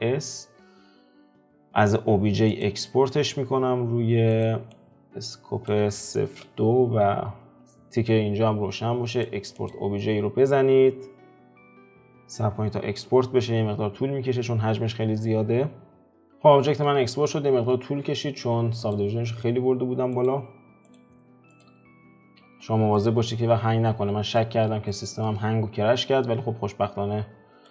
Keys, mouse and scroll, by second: 16.2-19.7 middle drag, 19.7-21.7 drag, 24.1-27.7 middle drag.